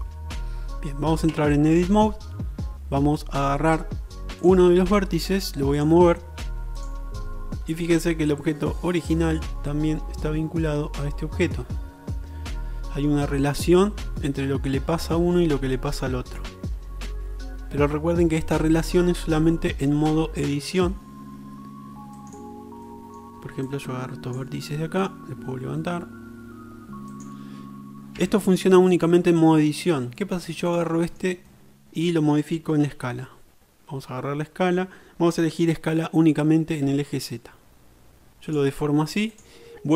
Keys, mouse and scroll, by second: 1.4 Tab, 4.5 click, 6.9-12.5 middle drag, 22.5-23.7 middle drag, 23.7-27.4 drag, 28.2 Tab, 28.2-31.8 middle drag, 34.0 s.